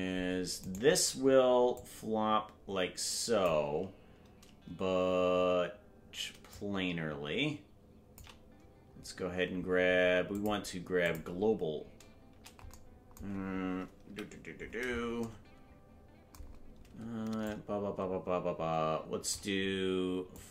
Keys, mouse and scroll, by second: 0.7 right click, 1.7-3.5 drag, 6.5-8.2 shift+drag, 10.3 click, 14.0 KP_Decimal, 14.5-15.3 scroll down 9, 17.4-19.3 shift+drag, 20.3 click.